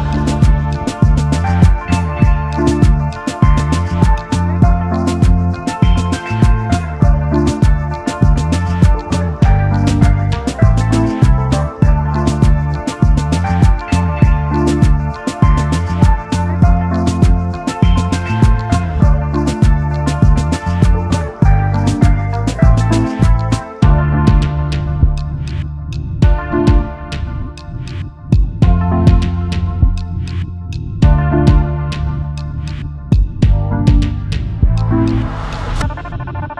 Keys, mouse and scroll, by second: 0.5 alt+scroll down 1, 1.3 alt+scroll up 1, 3.6-4.0 alt+scroll down 1, 4.6 space, 4.6 double click, 4.9 space, 6.2 alt+scroll up 1, 6.7 space, 6.8 double click, 7.2 space, 9.8 space, 11.0 space, 11.5 alt+shift+click, 17.8 alt+scroll up 1, 18.7 alt+scroll down 1, 18.8 double click, 20.1 space, 24.5 alt+scroll down 1, 25.1 space, 25.4 double click, 25.5 space, 32.3 ctrl+8, 33.2 double click, 33.7 alt+scroll up 1.